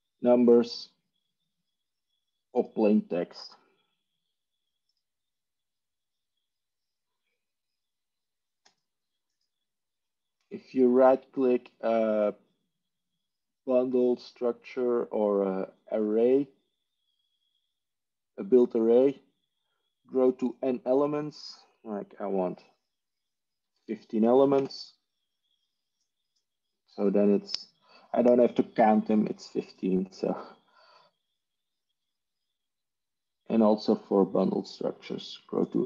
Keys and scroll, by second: 23.4-24.1 typing, 24.5 Return.